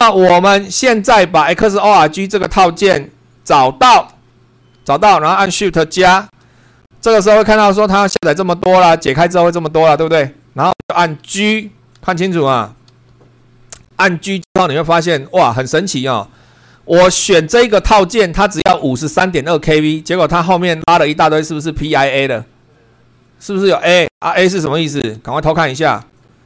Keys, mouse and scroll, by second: 4.1 super+2, 6.2 shift+=, 12.9 g.